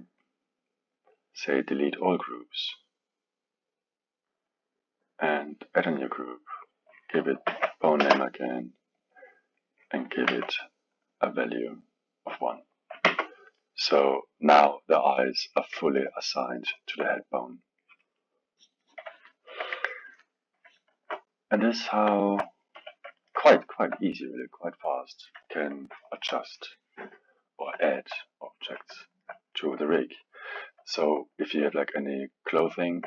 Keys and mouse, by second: 1.4-4.6 drag, 5.8-10.3 drag, 10.3 Tab, 12.3 click, 13.1 Tab, 13.6-20.9 middle drag, 20.9 ctrl+Tab, 21.8 click, 22.1-22.7 alt+middle drag, 22.7 KP_1, 23.2-29.7 ctrl+middle drag, 29.7 KP_1, 30.9-33.0 alt+middle drag.